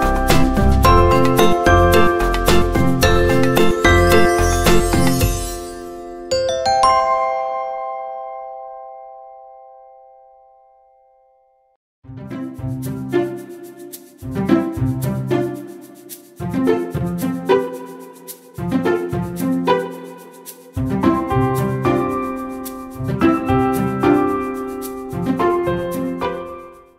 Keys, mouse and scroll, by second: 4.4-6.0 alt+drag, 6.1 click, 14.0 click, 15.4 scroll down 1, 15.9 click, 16.8 ctrl+h, 17.3-17.8 scroll down 1, 17.8 scroll up 1, 18.4 scroll up 1.